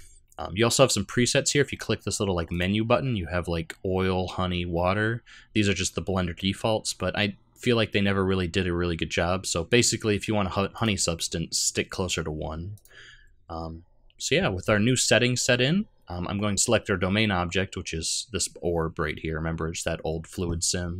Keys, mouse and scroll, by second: 2.5 click, 10.8 click, 12.8 click, 17.2-20.3 scroll down 2.